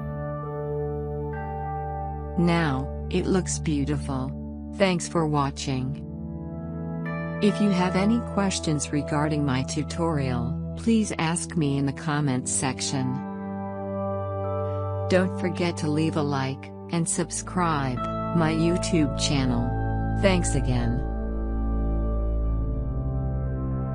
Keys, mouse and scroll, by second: 0.8 alt+scroll up 1, 1.7 space, 1.8 click, 2.5 alt+scroll up 1, 3.2 alt+scroll down 1.